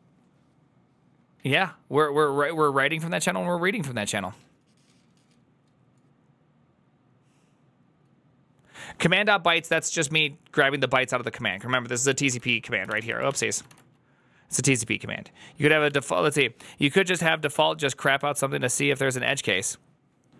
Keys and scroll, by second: 12.6-13.5 typing, 15.7 ctrl+c.